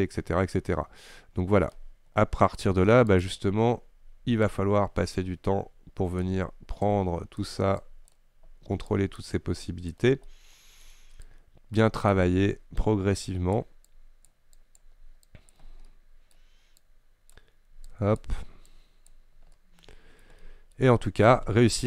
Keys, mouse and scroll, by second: 3.3-10.3 drag, 10.3-11.3 middle drag, 11.3-16.0 drag, 16.0 middle click, 16.9-19.6 drag, 19.6-21.8 middle drag.